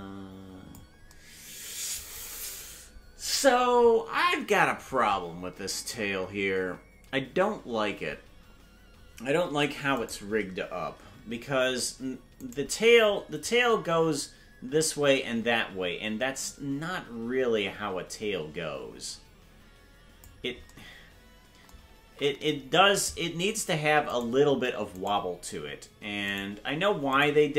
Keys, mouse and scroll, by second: 11.1 right click, 12.9 right click, 13.4-20.2 drag, 22.6 ctrl+z, 24.4-25.2 shift+right drag, 26.5 shift+right click, 27.4 shift+right click.